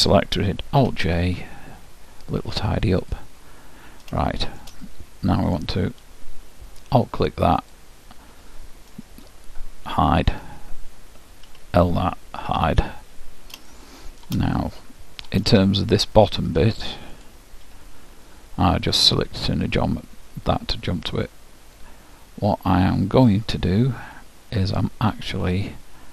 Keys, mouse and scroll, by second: 0.9 alt+j, 3.1-5.0 drag, 3.5 middle click, 4.8-6.7 middle drag, 7.6-9.5 drag, 10.3 h, 11.5 l, 12.5 h, 13.1 middle click, 13.9-16.4 middle drag, 17.1-18.5 drag, 17.7 KP_Decimal, 18.5-21.4 middle drag.